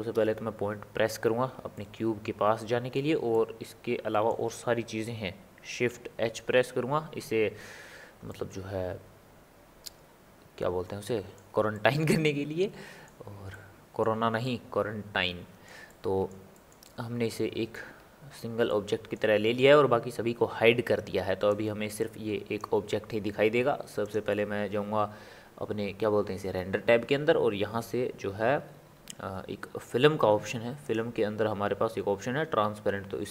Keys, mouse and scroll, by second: 0.1 KP_Decimal, 1.7-6.4 ctrl+middle drag, 6.4 shift+h, 8.3-11.3 ctrl+middle drag, 11.7-17.9 middle drag, 17.9-18.7 scroll up 2, 18.7-21.5 middle drag, 21.5-24.1 drag, 27.9-28.5 scroll up 1, 28.5 scroll down 1, 28.5 scroll up 1, 28.6 scroll down 1, 28.7 scroll up 1, 28.8-29.6 scroll down 3, 29.6 scroll down 1, 29.9-30.8 scroll up 1, 30.8-31.4 drag, 31.4-33.3 scroll down 3.